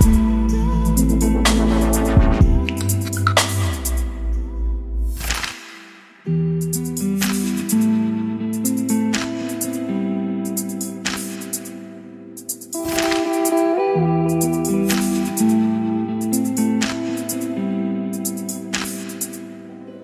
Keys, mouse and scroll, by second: 0.0-3.7 typing, 3.9 Return, 6.8-9.6 typing, 9.6 Return, 10.7-12.0 middle drag, 11.8-13.9 typing, 14.9-16.0 typing, 18.0-20.0 typing, 18.5 Return.